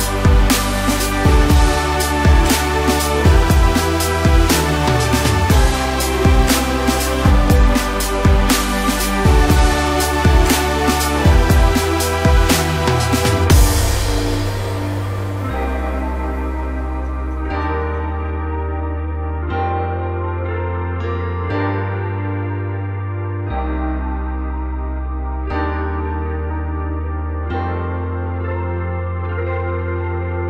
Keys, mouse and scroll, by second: 0.6 click, 1.2 scroll down 1, 1.4-3.0 middle drag, 3.0 KP_1, 3.5-4.9 scroll up 1, 4.9-5.3 drag, 5.3-6.7 scroll down 2, 6.7 click, 7.0-9.0 middle drag, 9.0 KP_1, 9.6-10.2 scroll up 1, 10.2 ctrl+KP_4, 10.4 ctrl+KP_4, 11.8 click, 12.2-13.2 scroll down 1, 13.9 shift+s, 15.6 click, 18.0-19.3 drag, 19.3 KP_7, 21.0-24.1 drag, 25.0-30.4 drag.